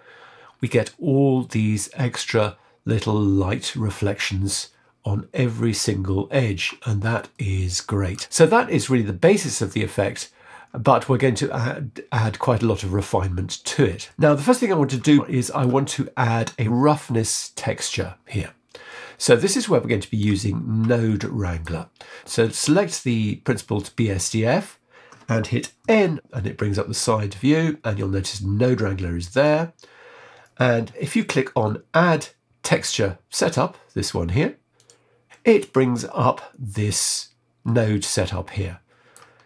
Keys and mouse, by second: 7.5 middle click, 14.1 middle click, 15.2 middle click, 18.8-20.2 middle drag, 21.1 middle click, 22.5-23.7 drag, 25.9 n, 29.3 click, 34.8 click, 37.6-39.1 middle drag.